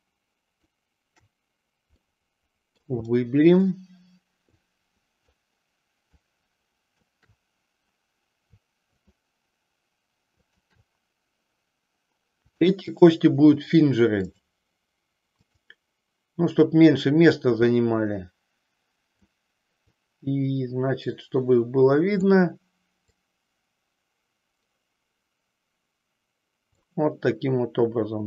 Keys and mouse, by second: 2.0 middle click, 3.3 shift+middle click, 4.5 shift+click, 6.1 shift+click, 10.5-11.5 shift+drag, 12.4-14.5 drag, 15.5 click, 17.8-19.4 drag, 19.9-22.4 drag, 23.1-26.8 drag.